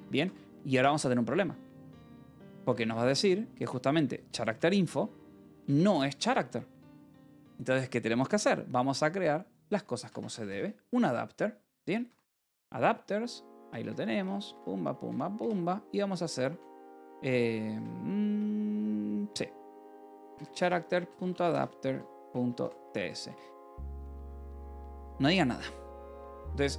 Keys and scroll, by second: 0.8 ctrl+s, 1.9-3.0 typing, 3.5 Return, 3.9 Escape, 4.9-7.7 typing, 9.0-14.5 typing, 13.7 Escape, 14.1 Return, 15.3 Return, 16.0 c, 16.4 a, 17.6 e, 18.2 BackSpace, 19.5-23.1 typing, 24.4 t, 24.6 Escape, 25.1 Return, 25.4 y, 25.8 Return, 26.2 y.